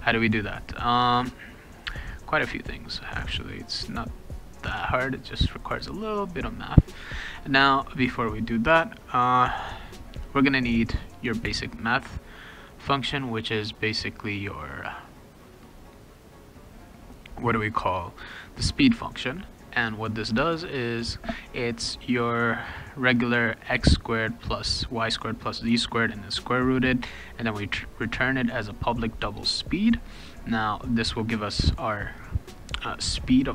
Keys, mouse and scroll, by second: 5.6 click, 9.1 click, 10.7 click, 13.7 click, 18.2 click, 18.4 click, 19.4 click, 19.8 click, 27.4 click, 28.2 click, 28.6 click, 29.6 click.